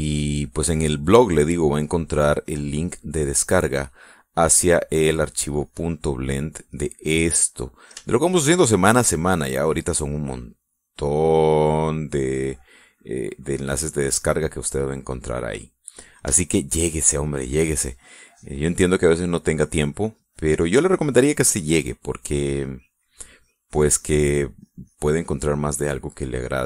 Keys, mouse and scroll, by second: 2.6 middle click, 3.5-5.3 drag, 5.6 click, 6.7-8.5 drag, 8.6 middle click, 9.1 shift+middle click, 10.2-12.8 drag, 13.3-14.4 drag, 15.6 middle click, 16.7 middle click, 17.5 shift+middle click, 18.0 shift+middle click, 19.1 middle click, 20.0-22.9 drag, 23.0 middle click, 23.6 click, 26.4-26.6 drag.